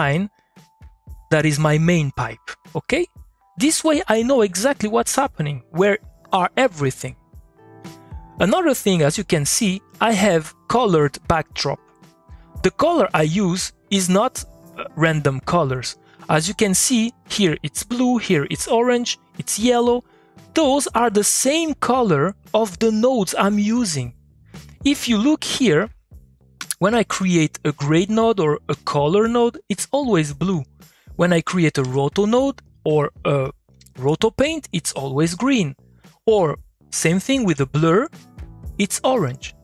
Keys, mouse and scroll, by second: 3.0 middle click, 5.0 middle click, 7.1 middle click, 8.8 middle click, 9.6 click, 9.9 middle click, 10.8 click, 13.9 middle click, 14.0 click, 15.7 middle click, 16.2 click, 16.5 middle click, 18.7 middle click, 20.5 middle click, 22.5 middle click, 24.4 middle click, 25.2 click, 25.5 middle click, 25.8 click, 26.6 g, 27.1 middle click, 27.2 click, 28.7 c, 29.3 middle click, 29.4 click, 30.8 middle click, 31.2 click, 31.8 o, 32.2 click, 33.7 p, 34.4 click, 35.3 middle click, 35.9 click, 37.3 click, 37.4 b, 37.9 click, 39.4 middle click.